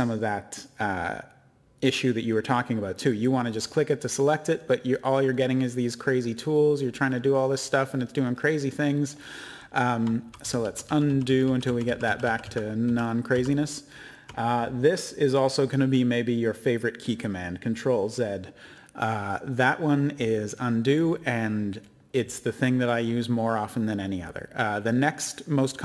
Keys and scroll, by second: 10.2 ctrl+z, 10.4 ctrl+z, 10.6 ctrl+z, 10.8 ctrl+z, 11.1 ctrl+z, 11.3 ctrl+z, 11.4 ctrl+z, 11.6 ctrl+z.